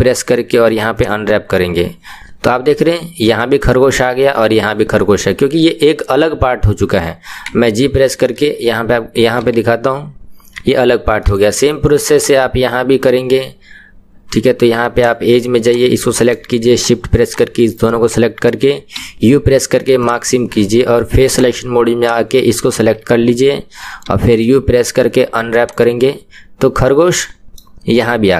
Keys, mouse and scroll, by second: 1.0 u, 2.8-7.6 middle drag, 7.6 g, 9.4 g, 11.2-12.2 middle drag, 12.2 click, 15.0 click, 16.0 middle click, 16.8 shift+click, 17.3 shift+click, 17.7-18.9 middle drag, 20.1 u, 21.4 click, 25.7 u, 26.6-28.3 middle drag.